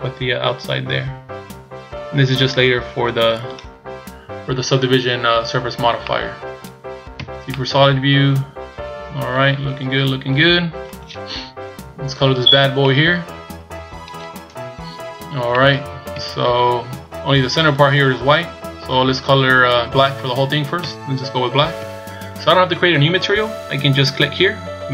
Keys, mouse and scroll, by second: 5.0-5.6 scroll down 1, 5.6-6.0 scroll down 2, 6.0 middle click, 7.1 z, 7.5 middle click, 11.6 KP_1, 12.5-12.9 scroll down 3, 12.8 middle click, 14.5 KP_1, 15.5 middle click, 16.1 z, 20.8 z.